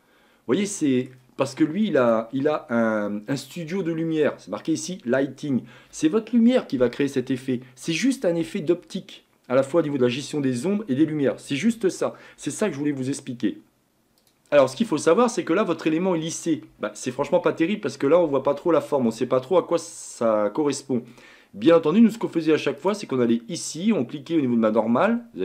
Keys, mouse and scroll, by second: 2.0-5.2 drag, 14.2 click, 14.7-22.8 middle drag, 22.8-25.4 drag.